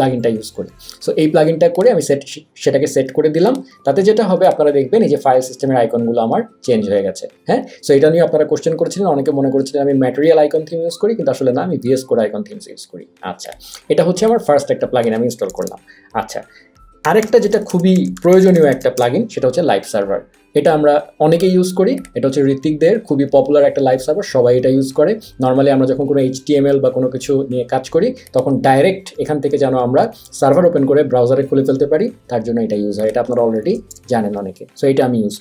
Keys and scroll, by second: 15.5 BackSpace, 16.8-19.2 typing, 33.6 super+a, 33.9 BackSpace.